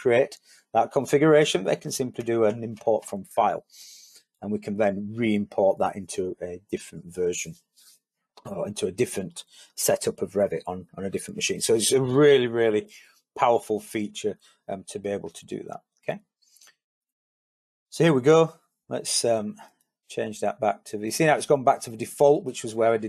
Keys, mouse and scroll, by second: 2.0 click, 2.5 click.